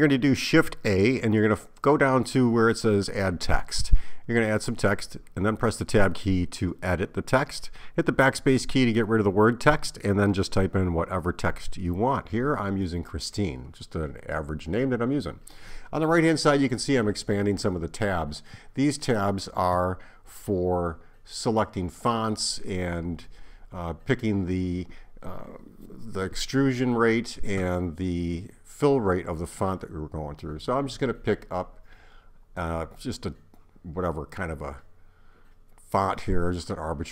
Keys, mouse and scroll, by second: 0.8-1.1 BackSpace, 1.3 BackSpace, 2.5-4.2 typing, 12.5 click, 13.8 click, 15.0 click, 16.9 click, 19.6 click.